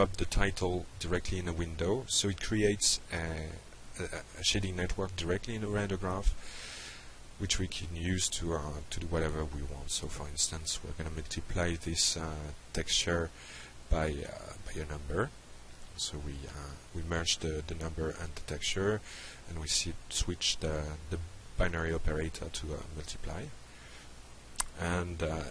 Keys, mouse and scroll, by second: 0.9 drag, 1.4-2.1 shift+drag, 4.5 click, 6.7 ctrl+space, 8.0-10.1 typing, 10.7 Down, 11.0 Return, 11.8 drag, 12.2-13.2 shift+drag, 13.6 click, 16.9 click, 17.9 click, 19.2 click, 20.4 click, 21.6-24.6 drag, 25.4 click.